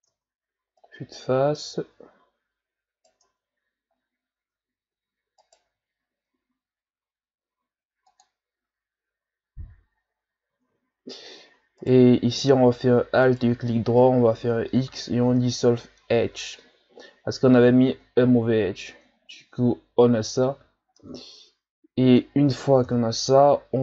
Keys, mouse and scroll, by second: 0.1 Tab, 0.8 right click, 3.2 Tab, 4.4 Tab, 5.4 alt+right click, 6.3 x, 10.5 ctrl+z, 11.5-11.8 shift+scroll down 1, 11.8 right click, 13.3 alt+right click, 14.7 x, 17.8 Tab, 19.2-19.5 shift+scroll down 4, 20.1-20.9 shift+scroll up 3, 20.9 shift+scroll up 1, 20.9-22.8 middle drag, 22.8 KP_1.